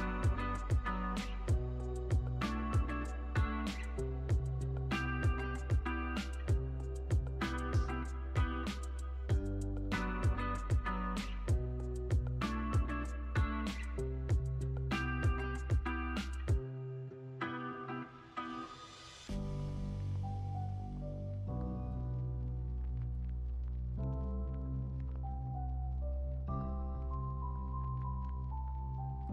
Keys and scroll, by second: 0.9 F9, 3.7 F9, 9.9 F9, 14.6 super+a, 15.7 super+s, 17.6 space, 23.1 space, 25.3 u.